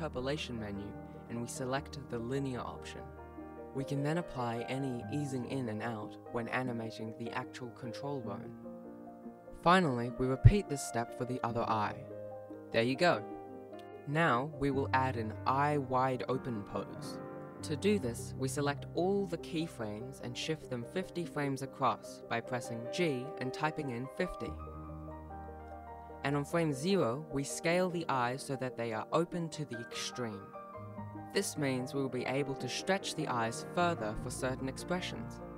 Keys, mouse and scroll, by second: 3.1 alt+a, 4.0 click, 8.2 shift+Left, 10.5 Right, 12.5 Right, 12.9-14.7 Right, 15.3 Right, 15.6 Right, 16.1-18.3 Right, 18.7-20.0 Left, 20.2 ctrl+s, 20.2 click, 20.2 a, 21.9 g, 26.0 g, 27.3 right click, 29.2 g.